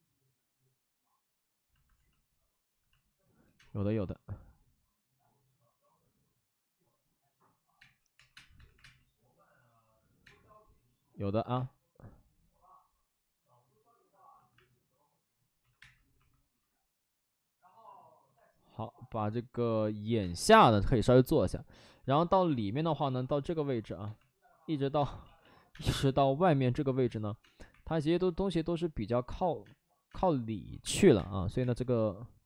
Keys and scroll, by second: 3.1 space, 3.4 5, 3.5 space, 3.5 5, 7.7-8.7 typing, 10.2 space, 11.5 space, 14.4-16.1 typing, 20.1 space, 20.9 2, 22.3-22.9 typing, 24.0 2, 24.9 space, 25.2 ctrl+z, 25.6 ctrl+z, 25.6 space, 27.4 space, 27.6 1, 29.6-31.1 typing.